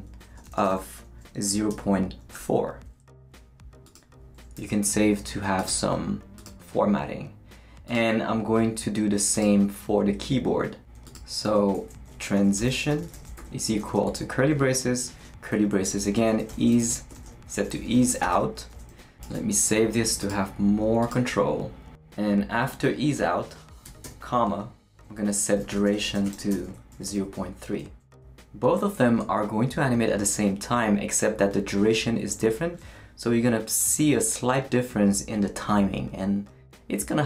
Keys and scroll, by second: 0.0-2.3 typing, 4.5 super+s, 11.4-18.8 typing, 18.9 Right, 19.2 super+s, 23.8 ,, 24.0 space, 25.3-27.8 typing.